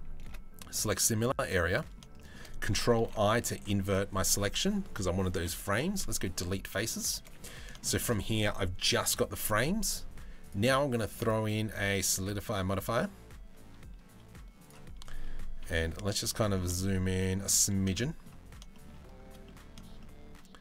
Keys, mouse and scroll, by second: 0.6 middle click, 2.6 ctrl+i, 2.9 z, 5.3 Delete, 6.3 z, 6.8 a, 7.0 middle click, 7.4 shift+middle click, 10.0 click, 10.9-14.3 drag, 15.2 KP_Decimal, 15.8 middle click, 16.4 shift+middle click, 17.6 shift+middle click, 18.3 shift+middle click, 19.0 middle click.